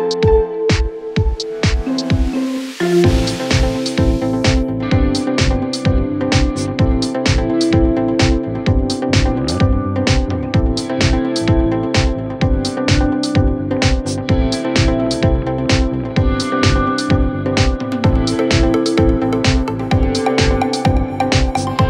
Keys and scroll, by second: 4.5 3, 4.7 F3.